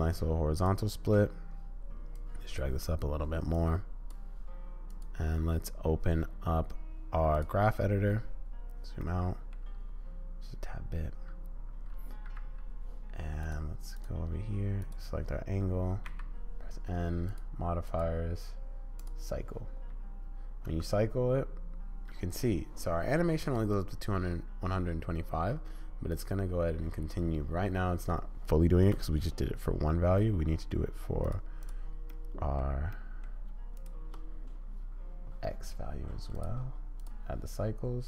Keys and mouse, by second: 2.3 click, 3.5 click, 5.0 click, 7.1 click, 9.2 middle click, 12.3 a, 13.4 click, 13.9 click, 14.8 click, 16.1 n, 18.0-20.6 drag, 20.6 space, 28.8 space, 30.2 click, 31.3 click, 31.6 click, 32.3 click, 33.1 click, 33.8 shift+click, 36.3-37.7 drag.